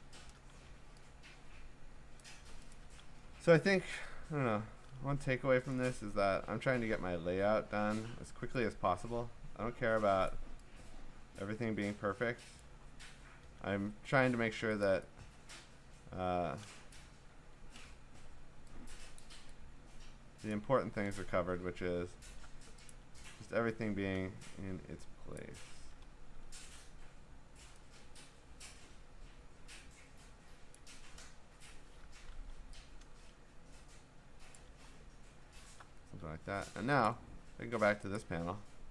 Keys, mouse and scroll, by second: 0.1 Return, 0.6 v, 2.2 click, 2.7 ctrl+click, 5.7 click, 6.0-6.7 scroll, 6.9 scroll, 7.4 ctrl+t, 10.3 click, 12.6 click, 13.2 Return, 13.9 scroll, 16.9 click, 17.3 ctrl+t, 19.2 click, 20.5 click, 21.4 Return, 21.9 scroll, 22.9 ctrl+click, 25.4 click, 26.3 ctrl+t, 30.7 click, 31.5 Return, 32.6 v, 34.6 click, 35.2-35.6 scroll, 37.1 click, 37.3-38.2 scroll, 38.2 click.